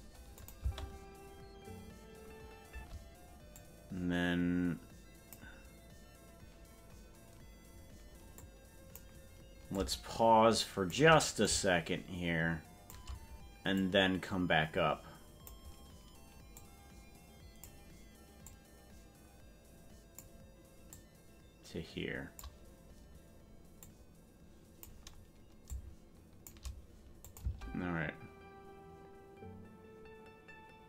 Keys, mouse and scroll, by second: 0.4 click, 0.6 space, 2.8 space, 3.6-5.4 drag, 8.4 click, 9.7-11.0 shift+drag, 11.4-13.0 shift+drag, 13.8-15.7 drag, 16.5-17.7 drag, 18.4-20.3 drag, 20.9-22.5 drag, 23.9-24.9 drag, 25.7 shift+click, 27.3 click, 27.7 space.